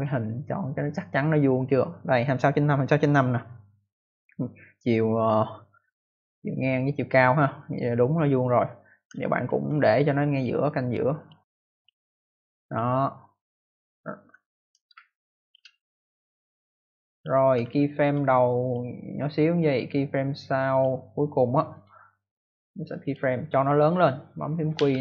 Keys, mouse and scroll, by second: 9.1 ctrl+alt+scroll down 1, 10.2 click, 11.1 click, 11.6 click, 12.6 click, 14.3-14.7 ctrl+alt+scroll down 1, 14.8 scroll down 1, 14.8 space, 15.0 click, 15.3 space, 15.4 space, 16.6 click, 17.7-18.7 ctrl+alt+scroll up 1, 20.6 click, 21.6 right click, 23.0 click, 24.7 q.